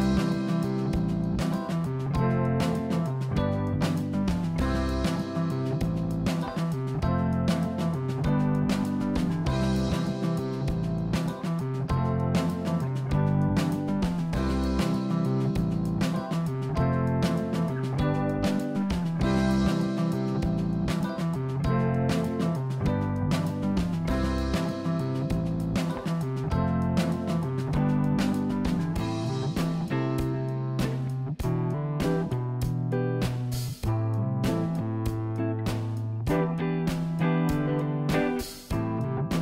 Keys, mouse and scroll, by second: 2.1 r, 10.5 ctrl+z, 11.6 s, 14.0-15.6 middle drag, 19.3 KP_1, 20.4 click, 20.9-22.0 scroll up 2, 22.0-23.1 scroll down 3, 23.1 click, 24.4 click, 29.6-30.2 scroll up 1, 30.9-32.5 scroll down 1, 38.1 click, 39.0 r.